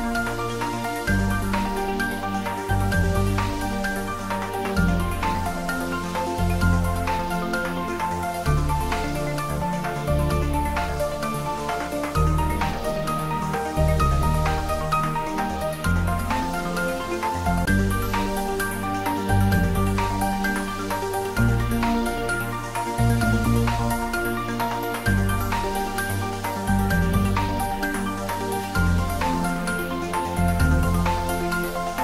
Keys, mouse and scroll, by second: 2.3 s, 5.7 click, 6.8 g, 9.0 click, 10.0 r, 11.6 click, 12.6 Tab, 13.2-15.0 scroll up 1, 15.2 Tab, 17.6 ctrl+z, 18.8 Tab, 20.0 r, 25.0 click, 26.0 r, 26.2 r.